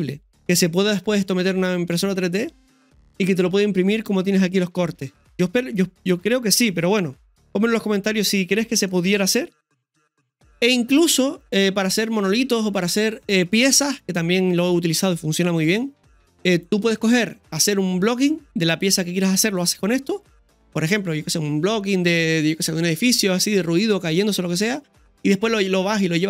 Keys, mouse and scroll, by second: 7.8 scroll down 1, 8.3 middle click, 10.0 scroll up 1, 12.0 scroll down 1.